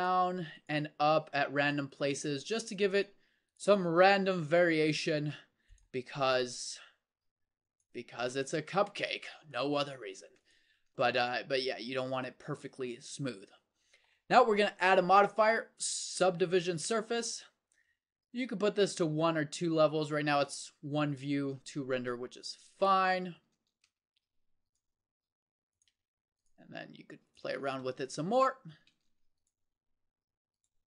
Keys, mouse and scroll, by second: 1.6 g, 2.4 g, 3.7 g, 6.6 g, 9.2 g, 10.7 Tab, 16.8 middle click, 23.6 Tab, 25.1 g, 26.6 g, 27.4 Tab, 28.9 Tab, 29.8 g.